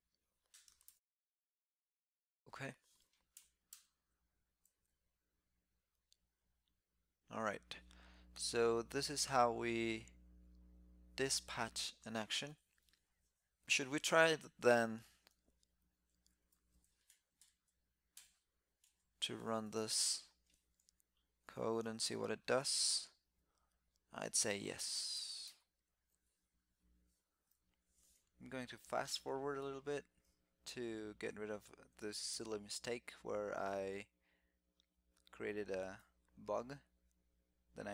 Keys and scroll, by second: 3.2 shift+super+k, 4.7 super+s, 16.0 shift+super+t, 25.1 alt+super+Left, 25.4 alt+super+Left, 32.2 alt+super+i, 33.5 super+s, 35.6 super+s.